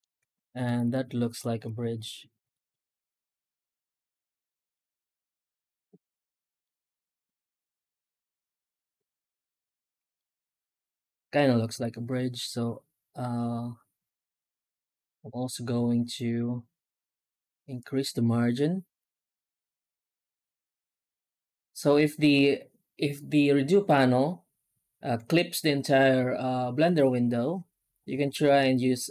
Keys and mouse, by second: 0.8 middle drag, 1.1 middle drag, 1.7 shift+middle click, 2.6-4.6 middle drag, 5.0-5.4 shift+middle drag, 6.5-8.3 middle drag, 10.1 shift+middle drag, 11.6 F9.